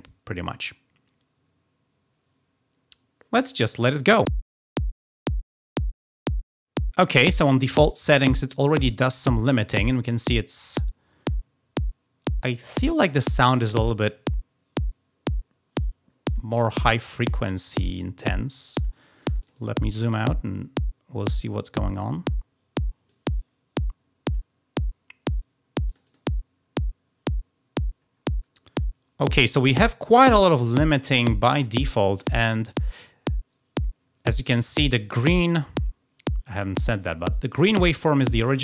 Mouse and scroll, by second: 3.9 click, 16.2 click, 16.7 middle click, 16.8 click, 17.7 click, 18.7 click, 19.0 click, 19.2 click, 19.4 click, 19.8-20.4 drag, 21.7 click, 23.0-24.1 drag, 25.8 click.